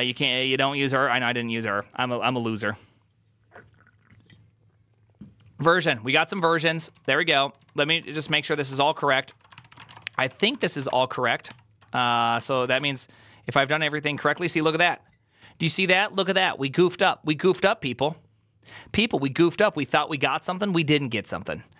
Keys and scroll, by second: 6.2-11.1 typing, 9.1 ctrl+d, 9.4 ctrl+c, 11.3 ctrl+c, 11.8 Up, 11.9 Up, 12.2 Up, 12.5 Down, 12.6 Return.